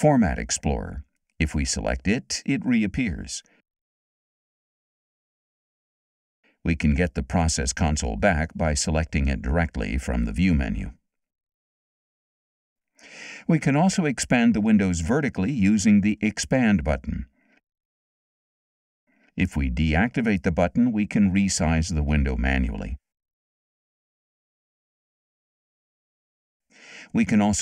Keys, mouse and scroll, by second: 2.4 click, 6.9 click, 7.7 click, 11.6 click, 17.6 click, 19.9 click, 23.7 click.